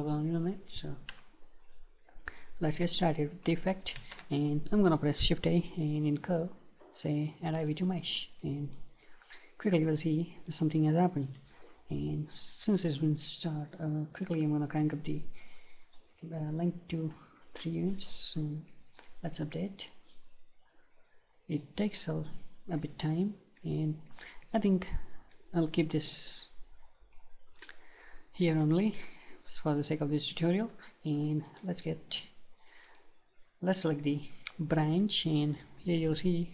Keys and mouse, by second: 4.0 shift+a, 8.4-11.8 middle drag, 14.2-17.5 drag, 18.7-21.6 middle drag, 21.6 click, 22.8-26.0 middle drag, 27.2-31.2 middle drag, 33.0-34.6 drag, 34.6-36.5 middle drag.